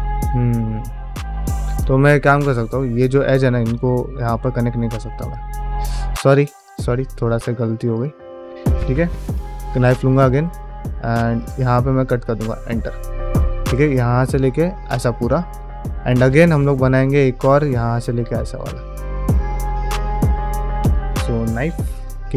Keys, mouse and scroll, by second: 2.2 middle click, 3.2 2, 3.5 click, 5.0 ctrl+click, 5.5 ctrl+x, 6.4 click, 6.7 ctrl+x, 7.1 1, 7.8 click, 9.1 k, 12.9 middle click, 15.4 shift+middle click.